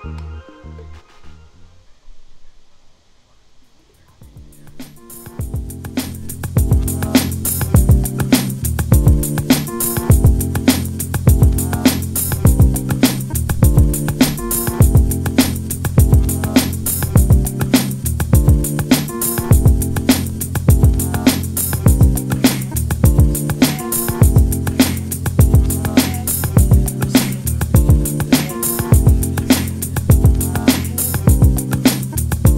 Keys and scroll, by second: 12.5-15.1 typing.